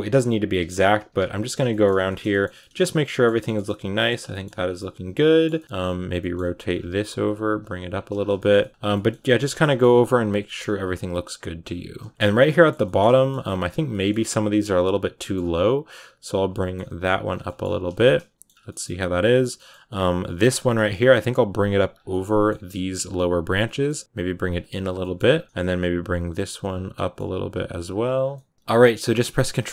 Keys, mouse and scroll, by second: 0.0-1.8 typing, 1.1 click, 1.5 shift+middle click, 1.7 scroll down 4, 1.9-4.5 shift+middle drag, 4.5 scroll down 5, 4.6 middle click, 5.6-5.9 scroll up 4, 5.9 right click, 6.0 middle click, 6.4-8.0 right drag, 6.4 r, 6.8 g, 7.3 r, 7.6 g, 8.0 scroll down 4, 8.2-9.5 shift+middle drag, 9.5 scroll up 3, 10.1 right click, 10.3 middle click, 10.5 r, 10.8 g, 11.4 r, 11.6 g, 12.1-13.2 shift+middle drag, 13.2-13.6 scroll up 6, 13.3 middle click, 13.8 middle click, 14.5 right click, 14.7 middle click, 15.3 g, 16.4 middle click, 16.7 g, 17.2 scroll down 2, 17.3 middle click, 17.6 a, 17.8 shift+middle click, 18.4 scroll up 2, 18.5 middle click, 19.2 scroll down 1, 19.4 middle click, 20.2 right click, 20.4 middle click, 20.8 g, 21.9 scroll up 1, 22.0 middle click, 22.4 g, 23.5 middle click, 23.8 g, 24.6 scroll down 3, 24.7 a, 24.9 middle click, 25.2 scroll down 4, 25.3 middle click, 25.4-25.9 scroll up 2, 25.9 right click, 26.0 g, 26.8 middle click, 27.3 g, 27.6 r, 27.9 g, 28.2-29.7 middle drag.